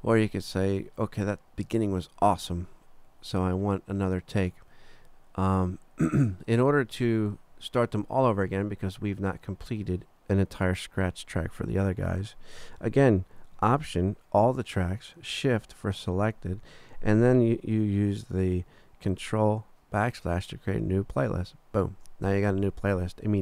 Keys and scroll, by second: 20.9 ctrl+alt+shift+\.